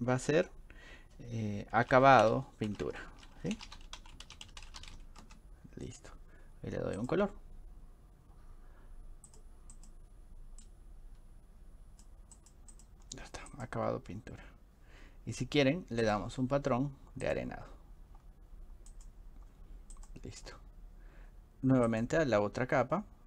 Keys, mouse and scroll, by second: 1.6-5.4 typing, 2.7 click, 7.0 click, 9.3 click, 9.7 click, 10.6-12.0 drag, 12.4 click, 12.7 click, 13.5 click, 16.1 click, 17.2 click, 18.9 drag, 20.0 click, 21.9 click.